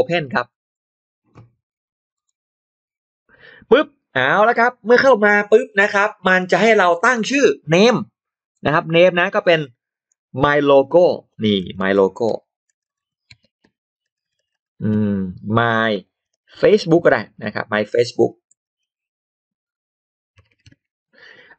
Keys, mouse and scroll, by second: 0.3 shift+right click, 0.5 shift+right click, 2.0 click, 2.1 right click, 4.7 right click, 8.4 click, 10.7 click, 10.7 m, 11.9-20.3 typing, 12.1 click.